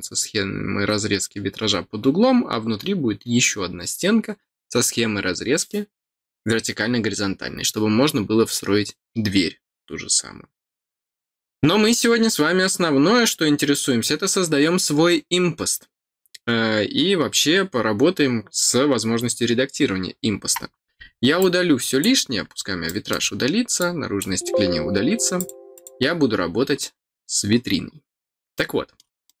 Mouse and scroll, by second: 20.6 scroll down 2, 21.3 click, 22.8 middle click, 23.7 click, 25.3 click, 25.7 click, 26.3 middle click, 28.5 middle click, 29.2 middle click.